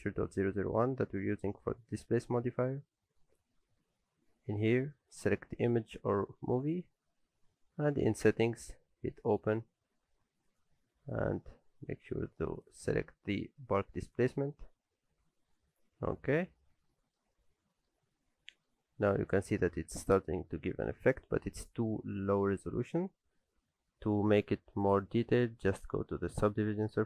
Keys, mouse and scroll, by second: 5.1 click, 9.1 click, 16.2 scroll up 1, 16.9 shift+middle click, 17.3 middle click, 18.1 shift+middle click, 24.8 click.